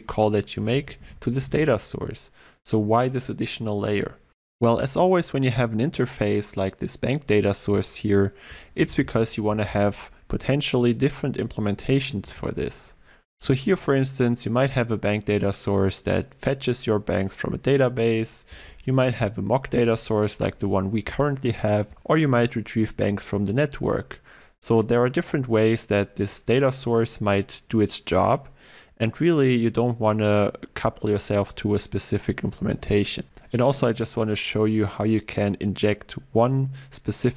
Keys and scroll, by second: 0.7 Down, 0.8 ctrl+w, 12.3 ctrl+b, 13.3 ctrl+w.